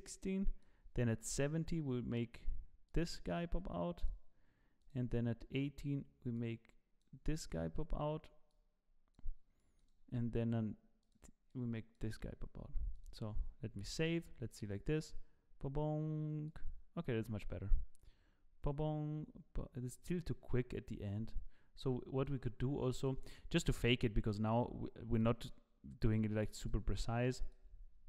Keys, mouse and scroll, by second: 0.0 click, 2.1 click, 3.0 click, 3.6 click, 4.9 click, 6.4 click, 7.5 click, 8.6 click, 9.8 click, 11.1 click, 11.5 click, 13.1 click, 13.9 ctrl+s, 14.6 click, 16.4 click, 16.9 click, 23.0 click, 25.2 click, 26.1 click, 26.6 click.